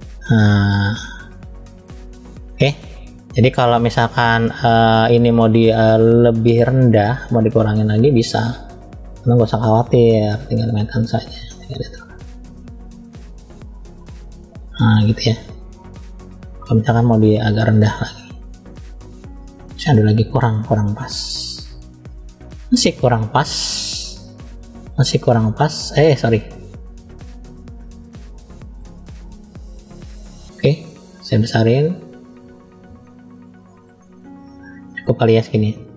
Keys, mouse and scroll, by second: 0.3-1.5 drag, 2.3 middle click, 3.2 scroll up 1, 6.3 click, 7.5 click, 8.7 scroll down 1, 10.0-10.6 scroll down 1, 10.0 f, 12.6-14.1 drag, 17.2 middle click, 17.2 scroll up 2, 19.4-20.0 drag, 21.0 middle click, 22.5 click, 24.8-27.7 drag, 28.7-29.4 drag, 31.3 f, 32.8 click, 34.7-35.9 middle drag.